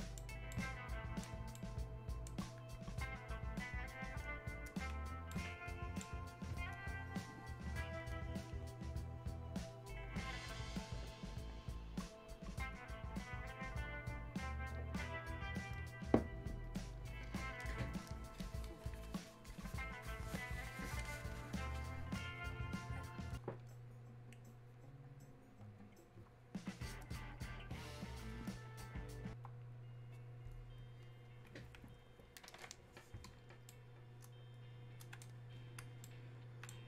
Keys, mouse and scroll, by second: 2.8-3.4 scroll down 1, 5.1 scroll up 1, 5.3-9.6 alt+right drag, 33.7-36.8 right drag.